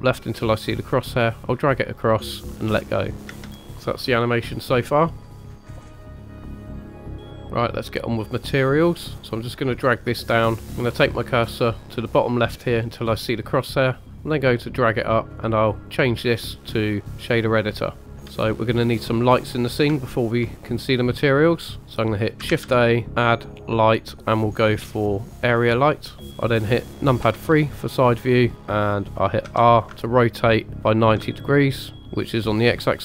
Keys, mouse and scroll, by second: 0.4-2.5 drag, 3.3 space, 7.4 click, 9.7 click, 10.2 click, 13.3 click, 14.1 click, 14.3 click, 14.5 click, 14.7 click, 15.2 click, 15.9 click, 18.0 click, 18.4-18.8 middle drag, 19.0-19.9 scroll down 1, 19.9 scroll down 2, 20.1 shift+middle drag, 20.5 click, 21.7 click, 21.9 scroll up 1, 22.5 shift+a, 27.2 KP_3, 28.2 scroll up 2, 28.6 scroll down 2, 29.6 r, 30.9 ctrl+click.